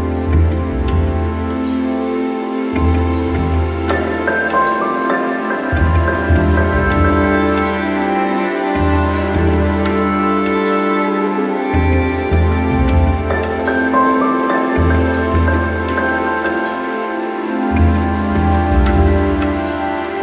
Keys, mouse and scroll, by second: 0.8 click, 1.4 alt+middle click, 1.4 scroll, 2.1 middle click, 3.2 click, 4.5-7.1 drag, 8.2 alt+scroll, 8.8-9.5 alt+scroll, 10.3 click, 11.2-12.2 alt+scroll, 12.3 click, 13.9 click, 14.8-15.5 scroll, 15.5 click, 17.3-17.6 scroll, 18.2 scroll, 18.5 alt+middle click, 19.6 click.